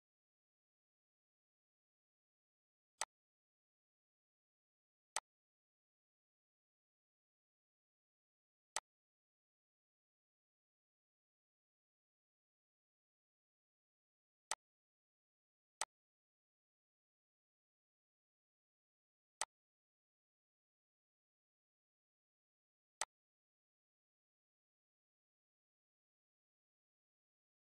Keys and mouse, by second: 3.4 ctrl+d, 5.2 click, 5.7 click, 13.4 click, 14.1 click, 17.2 click, 18.1 Delete, 19.6 click, 21.2 click, 22.8 click, 23.8 click, 25.4 click.